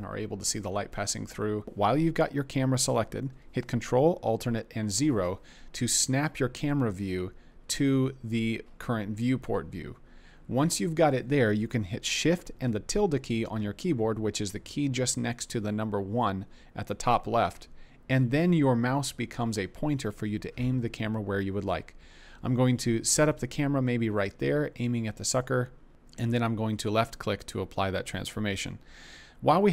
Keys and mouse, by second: 4.7 ctrl+alt+KP_0, 13.2 shift+`, 25.2 click.